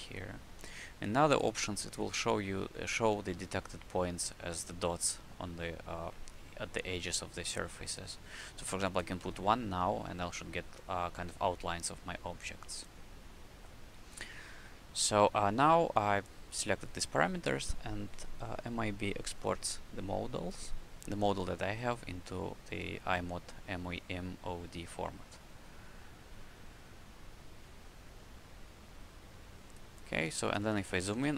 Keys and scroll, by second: 9.1 1, 30.2 w.